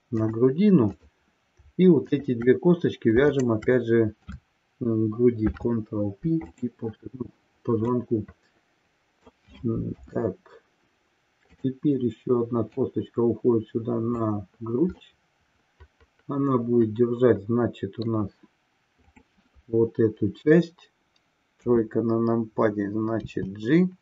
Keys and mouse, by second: 0.3 click, 1.0 click, 2.2 shift+click, 3.3-3.7 shift+drag, 5.3 ctrl+p, 7.8-9.4 middle drag, 10.0 KP_1, 11.4 click, 12.8 click, 15.0-18.2 middle drag, 19.2 click, 21.6 KP_3, 23.1 g.